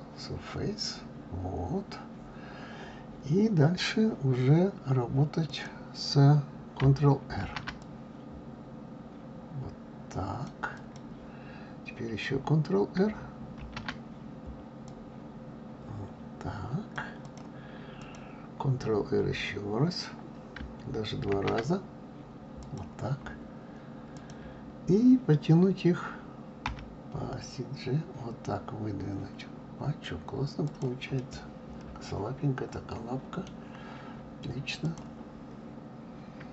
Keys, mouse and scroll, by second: 1.4-1.9 scroll up 2, 5.5 click, 7.4 ctrl+r, 13.5 ctrl+r, 17.9 click, 21.3 ctrl+r, 26.6 g, 31.2-34.2 middle drag, 34.8 click.